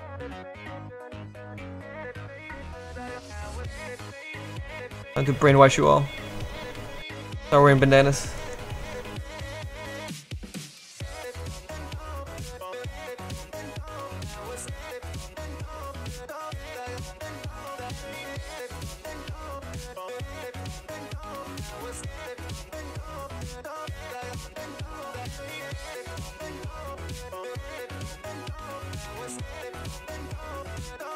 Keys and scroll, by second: 2.7 s.